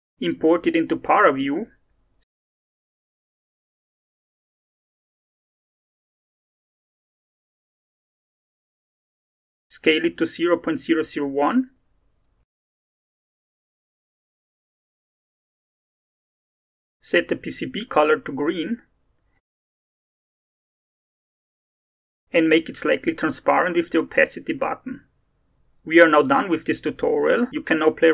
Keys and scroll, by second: 0.1 Return, 10.3-13.5 typing, 24.4-25.6 typing.